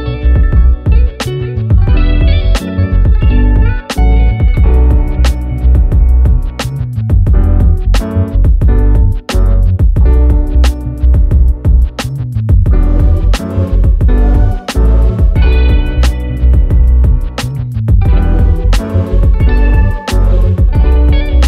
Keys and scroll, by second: 19.5 ctrl+z.